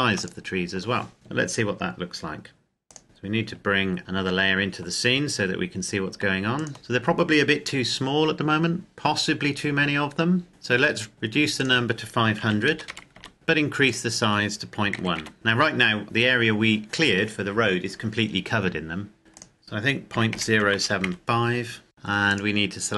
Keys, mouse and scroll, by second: 0.0 click, 2.9 click, 4.0 click, 11.1 click, 12.6 KP_5, 12.9 KP_0, 13.3 scroll down 1, 14.1 click, 15.1 KP_Decimal, 15.3 KP_Enter, 19.5 click, 20.3 KP_Decimal, 20.4 KP_0, 20.8 KP_7, 21.3 KP_5, 21.9 click, 22.4 right click.